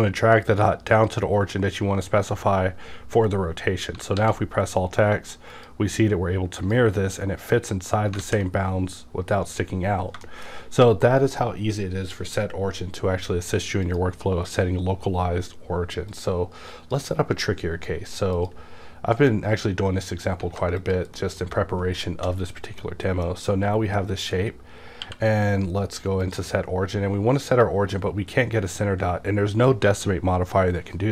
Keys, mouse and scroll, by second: 4.1 alt+x, 6.6 shift+click, 8.2 alt+a, 9.8 scroll down 1, 10.2 shift+middle click, 11.0-12.0 scroll up 1, 13.8 click, 16.1-19.2 drag, 19.2 x, 20.1 click, 20.5 a, 20.8 click, 21.1 middle click, 22.0 shift+middle click, 23.1-26.2 shift+middle drag, 25.0 q, 26.2 click.